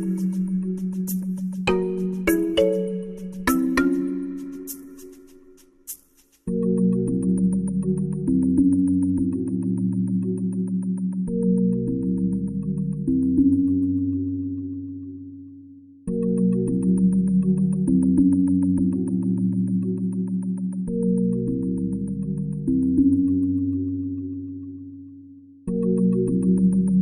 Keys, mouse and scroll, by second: 0.1-2.1 drag, 5.7 click, 6.7 t, 9.6 click, 20.3 click, 24.5-26.3 drag.